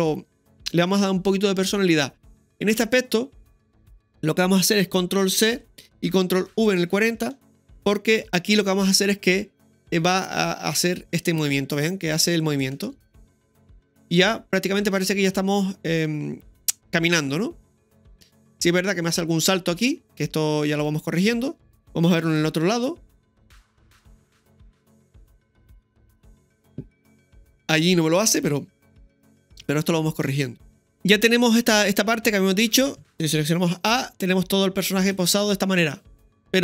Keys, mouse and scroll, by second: 2.5 scroll down 1, 2.6 right click, 3.5 click, 5.3-6.1 typing, 6.7 click, 7.5-8.2 typing, 9.8-12.6 drag, 12.7 space, 22.2 KP_3, 29.3 KP_3, 29.9 ctrl+KP_3, 30.9 click, 30.9 shift+middle click, 30.9-32.5 scroll down 1, 33.4 a, 34.8 click.